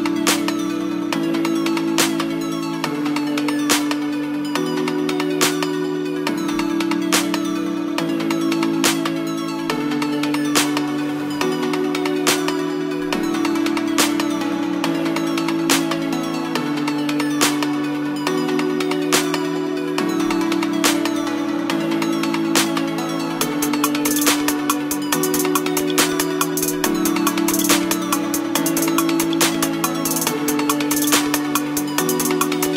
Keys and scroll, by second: 2.3 KP_2, 2.7 BackSpace, 3.1 KP_8, 3.2 KP_0, 3.4 Return, 5.2 KP_8, 5.3 KP_0, 5.5 Return, 32.6 space.